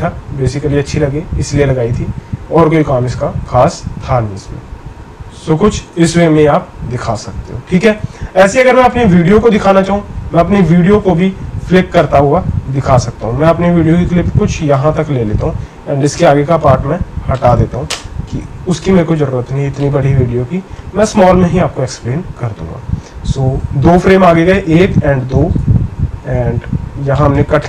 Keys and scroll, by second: 13.1 c, 16.1 v, 17.9 BackSpace, 23.8 Right, 25.5 c.